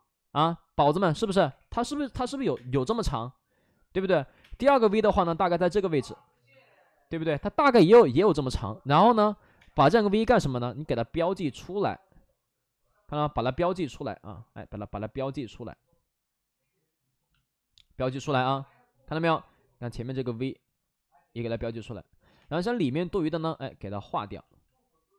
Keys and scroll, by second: 1.0 space, 1.4 3, 2.5 space, 4.3 space, 4.3 5, 5.1 space, 6.2 ctrl+z, 6.4 ctrl+z, 9.5 space, 18.0 space, 20.3 ctrl+z, 22.3 2.